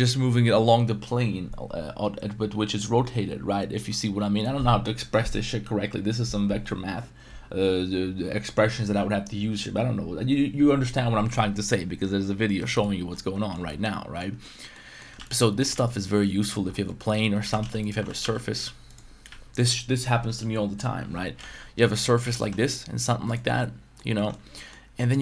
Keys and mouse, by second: 12.6 right click, 12.8-13.5 middle drag, 13.6-14.2 middle drag, 14.4 middle click, 14.7 middle drag, 15.2 x, 15.4 middle drag, 15.7 shift+a, 16.8 middle drag, 17.4 g, 17.6 z, 18.0 r, 18.2 y, 19.3 s, 21.3 s, 22.0 right click, 22.2 s, 22.4 y, 22.4 t, 23.3 click, 23.4 middle click, 24.2 middle click, 24.4 Tab, 24.5 middle click.